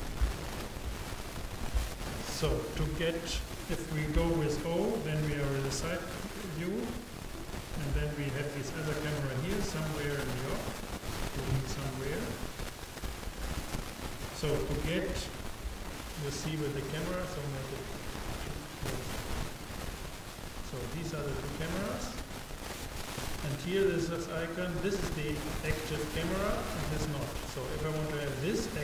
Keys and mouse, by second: 4.2 KP_0, 10.3-11.9 drag, 18.6-20.1 drag, 21.1-23.9 drag.